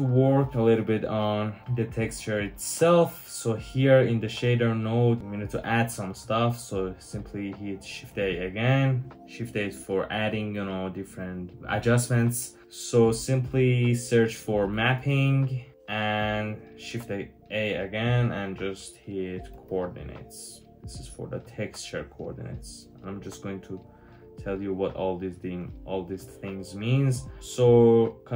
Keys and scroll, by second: 7.9 shift+a, 14.6-15.0 typing, 16.8 shift+a, 19.4-20.4 typing.